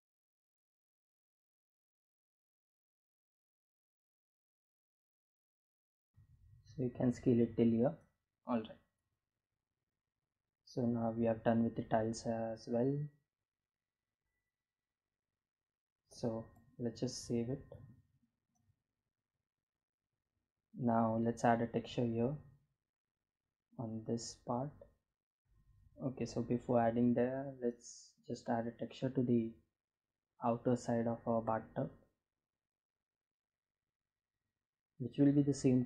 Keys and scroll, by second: 2.0 s, 3.3 s, 7.3 Tab, 16.0 ctrl+s.